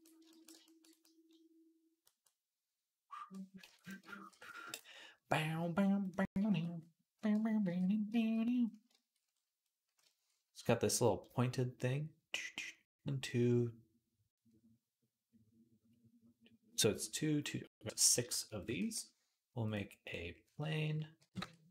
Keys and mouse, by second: 0.0-1.1 shift+drag, 3.5 ctrl+Tab, 3.7-6.7 ctrl+drag, 4.1 ctrl+s, 6.7-18.1 right drag, 7.5 alt+h, 18.1-21.7 shift+drag, 18.6 shift+a, 21.0 g.